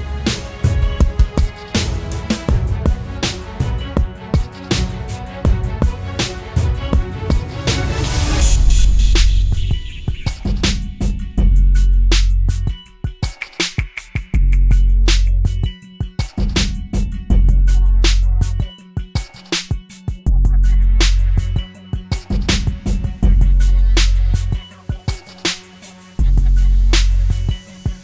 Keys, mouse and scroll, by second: 11.1-12.1 typing, 13.1-14.7 typing.